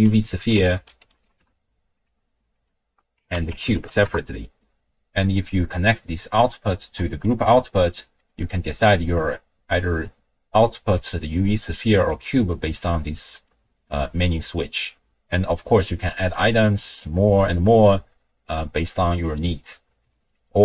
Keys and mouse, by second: 2.6-4.1 ctrl+drag, 5.4-6.6 drag, 8.2-9.1 drag, 11.0-12.1 drag, 12.6-13.5 drag, 14.9 n, 16.2 click, 16.7 click, 16.9 click, 17.6 click, 20.2 click, 20.5 click.